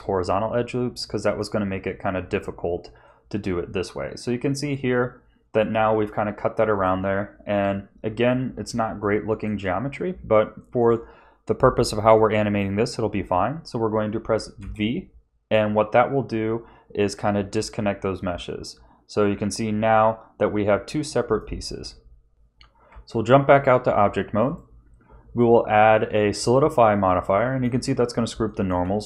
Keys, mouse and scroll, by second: 1.0 shift+middle click, 3.0 middle click, 7.4 KP_1, 9.0 shift+middle click, 10.5 shift+middle click, 12.1 shift+middle click, 13.3 scroll up 1, 14.6 v, 22.3 Tab, 22.9 Tab, 24.4 click, 27.3 middle click, 28.4 shift+middle click.